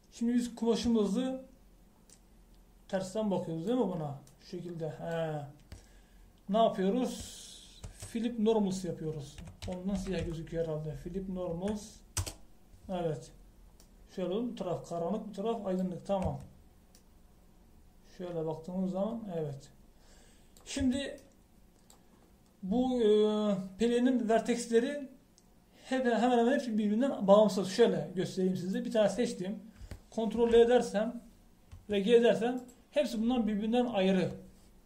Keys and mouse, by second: 1.9 Tab, 8.9 space, 14.9-16.1 middle drag, 16.6 middle click, 17.3 Tab, 21.9 Tab, 29.6-31.4 right drag, 31.4 ctrl+l, 32.8 g.